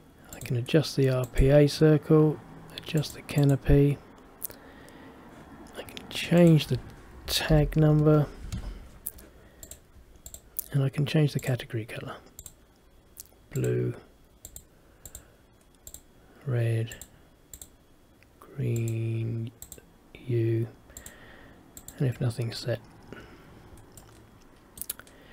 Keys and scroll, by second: 7.6 shift+t.